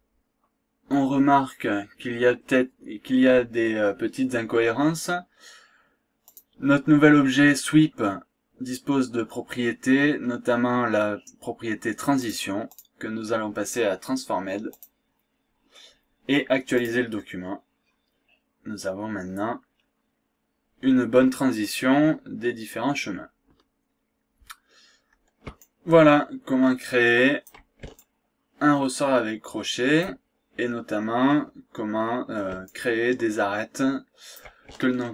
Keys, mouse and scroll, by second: 1.1-1.7 scroll up 2, 2.4 scroll down 1, 3.0 scroll up 1, 3.6-4.0 scroll down 2, 4.2 scroll up 2, 4.5 scroll down 2, 6.3 click, 6.8 scroll down 2, 7.2-7.6 scroll up 2, 7.8 scroll down 2, 12.2 click, 14.7 click, 16.8 click, 17.8-18.2 scroll up 1, 19.6-20.0 scroll down 2, 20.2 scroll up 2, 21.6-21.9 scroll up 2, 22.2-22.6 scroll down 2, 23.8 scroll down 2, 24.2 scroll up 2, 25.6-27.8 shift+right drag, 28.0-30.2 shift+right drag, 30.4-30.7 shift+scroll down 2, 30.7-31.2 scroll up 2, 31.4 scroll down 1, 31.8-32.1 scroll up 2, 32.7-34.6 shift+right drag.